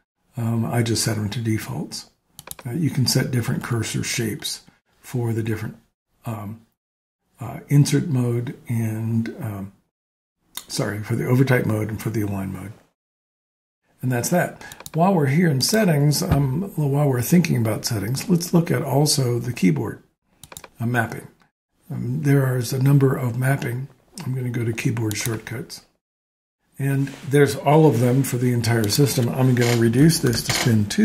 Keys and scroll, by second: 29.6-31.0 typing.